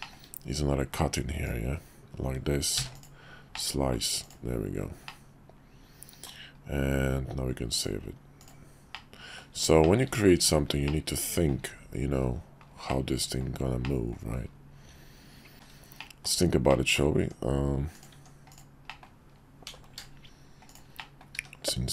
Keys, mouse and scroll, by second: 0.0 shift+middle click, 1.4-3.1 drag, 3.5-4.0 middle drag, 4.2 click, 5.1-6.3 middle drag, 7.7 click, 8.9-9.4 middle drag, 9.8 shift+middle click, 10.9-11.5 middle drag, 12.2 KP_5, 12.9-13.4 middle drag, 13.8 middle click, 15.5 shift+`, 16.0 middle click, 16.7 middle click, 17.2 Tab, 18.5 middle click, 18.9 middle click, 19.7 i, 21.0 middle click, 21.3 e.